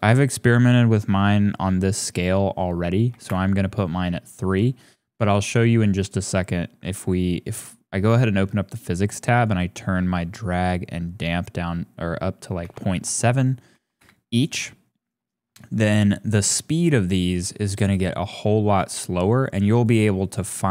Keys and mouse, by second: 6.0 click, 9.3-14.0 drag, 18.8 click.